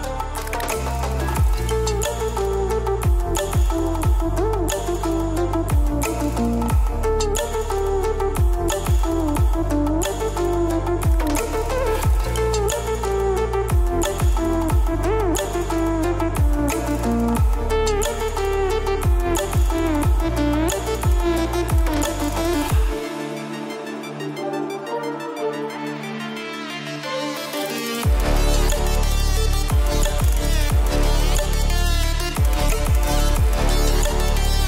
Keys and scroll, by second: 22.7 ctrl+v, 23.7 ctrl+t, 24.2 ctrl+alt+shift+t, 32.6 ctrl+l.